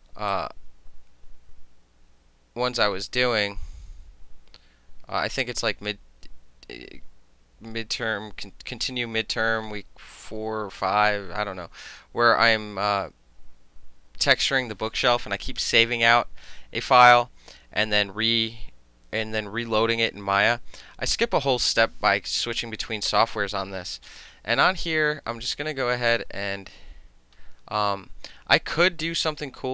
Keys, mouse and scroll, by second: 0.4-9.0 drag, 26.2 click.